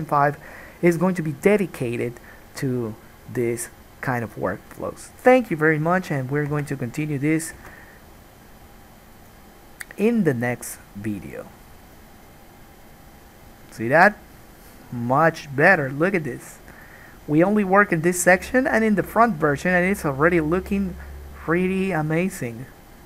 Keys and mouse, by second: 6.7 Tab, 7.8 alt+a, 9.4 click, 9.5-12.0 middle drag, 12.0 click, 12.2-22.2 middle drag, 22.2-23.0 drag.